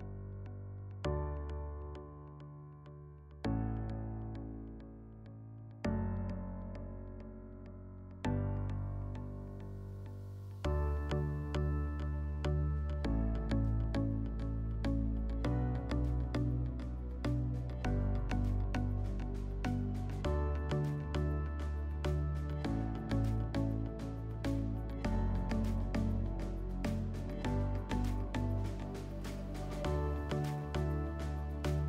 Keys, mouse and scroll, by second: 0.1 Tab, 0.3 Tab, 1.1 Tab, 2.6 click, 2.8 click, 3.3-3.8 typing, 5.2 Return, 11.7-13.3 drag, 17.1-18.7 drag, 22.6 click, 23.6 click, 27.6 click, 29.1-30.5 drag, 31.2-31.8 drag.